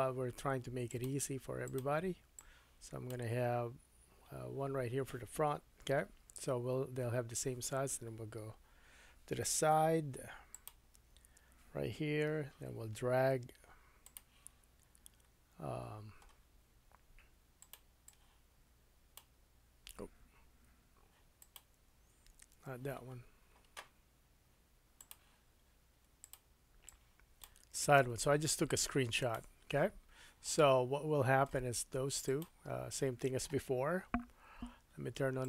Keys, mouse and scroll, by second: 10.6-21.4 middle drag, 10.9 KP_3, 21.4 click, 21.9 super+z, 22.5 super+z, 29.2 click, 29.3-32.2 middle drag, 32.2 click, 32.4-35.4 middle drag, 34.0 n, 35.4 click.